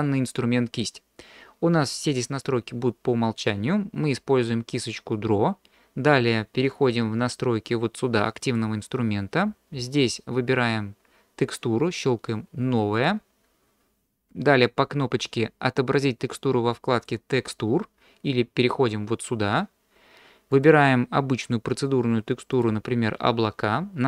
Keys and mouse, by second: 8.4 click, 17.0 click, 20.6-22.7 drag.